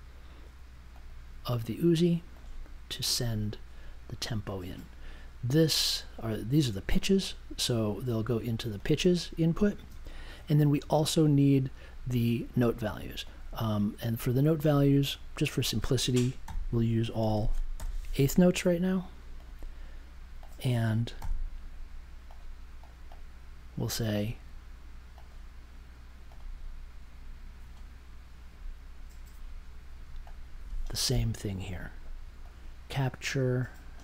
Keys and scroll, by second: 16.4-18.2 typing, 21.2 b.